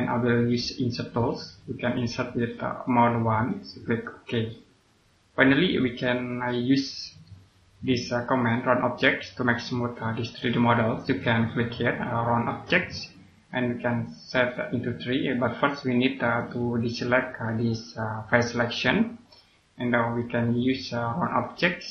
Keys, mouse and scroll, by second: 1.0 click, 3.7 click, 4.3 scroll down 1, 5.0 click, 6.5 scroll down 1, 6.9 middle click, 7.7 click, 12.4 click, 16.1 click.